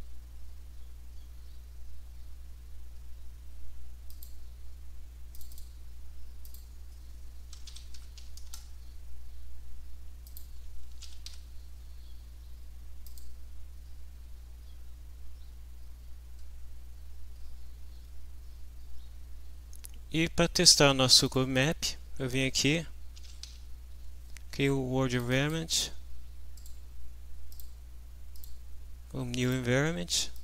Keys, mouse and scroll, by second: 4.1 click, 5.3 click, 6.4 click, 7.3-8.7 typing, 10.3 click, 10.7-11.8 typing, 13.0 click, 20.6 click, 21.2 click, 22.9-23.9 typing, 25.2 click, 26.6 click, 27.5 click, 28.4 click, 29.4 click, 30.3 click.